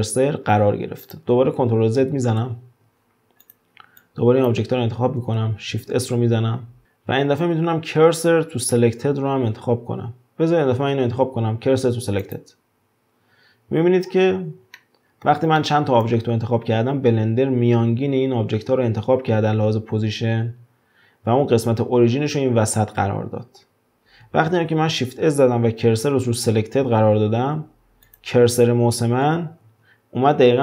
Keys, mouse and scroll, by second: 1.0 click, 1.6 ctrl+z, 2.0 ctrl+z, 3.0 scroll down 4, 3.4 click, 5.7 shift+s, 14.0-14.8 scroll up 5, 14.8-18.6 shift+middle drag, 24.6 shift+s, 29.5 ctrl+z.